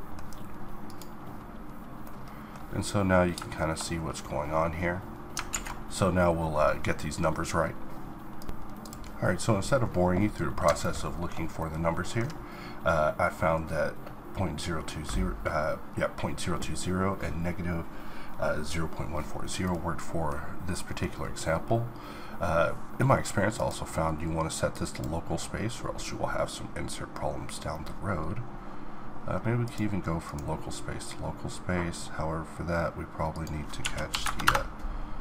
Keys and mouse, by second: 5.5 alt+a, 8.5-22.1 middle drag, 22.1-31.9 drag.